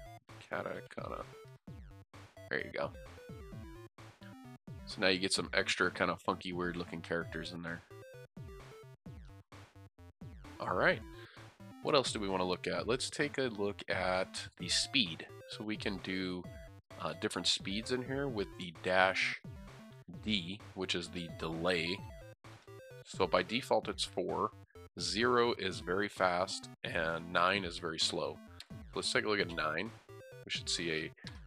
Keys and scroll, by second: 0.0-0.5 typing, 3.4 typing, 30.2 typing.